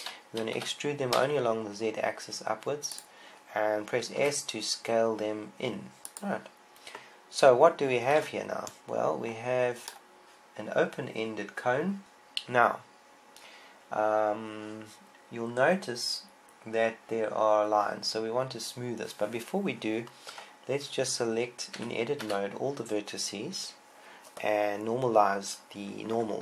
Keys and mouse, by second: 1.4 e, 3.8-5.0 drag, 5.1 click, 5.1 s, 5.4 right click, 7.0-8.9 drag, 9.0 Tab, 12.0 KP_1, 21.2 Tab, 22.6 a, 23.0 a.